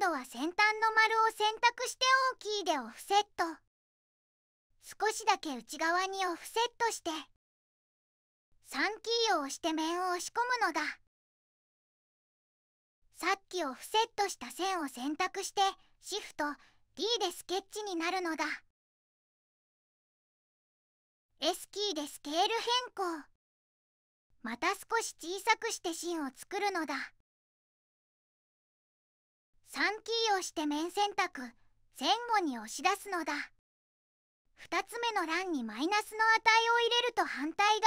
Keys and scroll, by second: 2.4 o, 5.0 0, 5.1 ., 6.0 2, 6.4 Tab, 7.2 Return, 10.4 3, 13.6 2, 16.1 d, 22.1 s, 30.9 3, 37.5 -.